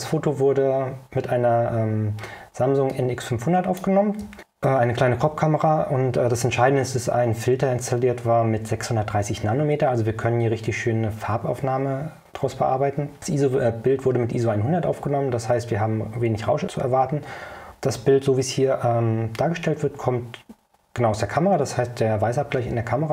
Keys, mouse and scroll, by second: 3.0 click.